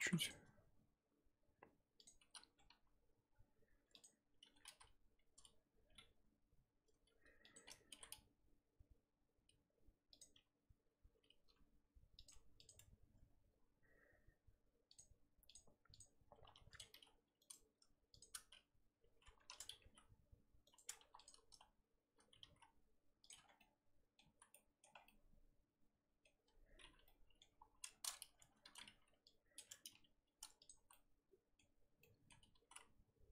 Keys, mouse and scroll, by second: 0.3 click, 2.0 click, 2.3 z, 2.7 s, 4.4 a, 4.7 r, 7.9 r, 10.3 g, 12.3 Tab, 12.6 click, 12.7 Tab, 15.6 click, 16.9 g, 18.2 shift+click, 19.4 3, 19.6 click, 19.8 g, 21.0 1, 21.2 click, 22.4 g, 23.3 Tab, 23.4 scroll down 3, 23.6 middle click, 24.2 scroll down 1, 24.2 z, 24.5 middle click, 24.9 scroll down 1, 25.0-26.8 middle drag, 26.8 scroll up 2, 27.0 middle click, 27.5 KP_3, 27.9-28.2 scroll up 4, 28.6 z, 29.6 click, 29.9 g, 30.8 z, 30.9-32.5 middle drag, 32.5 s.